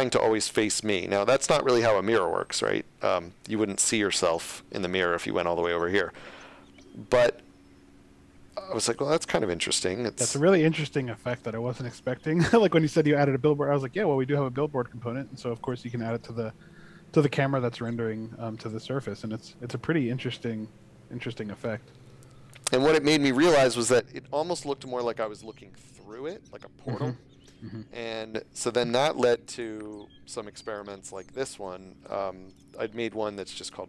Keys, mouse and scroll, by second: 26.1 a, 26.9 s, 28.6 space, 29.3 click, 30.6 click.